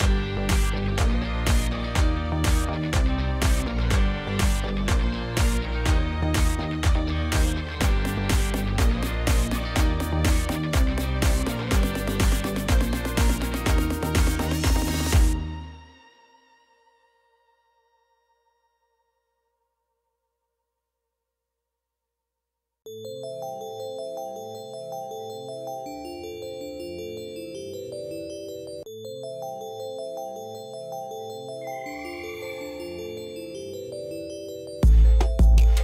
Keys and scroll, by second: 2.4 5, 2.6 0, 2.8 Return, 7.2 3, 7.4 0, 7.6 Return, 17.2-18.1 typing, 18.5 Return, 26.5-28.7 typing, 29.0 Return, 35.5 ..